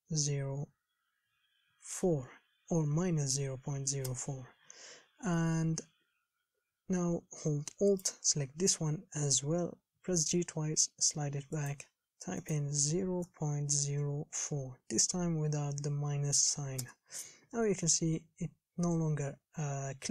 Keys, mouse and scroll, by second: 10.3 g.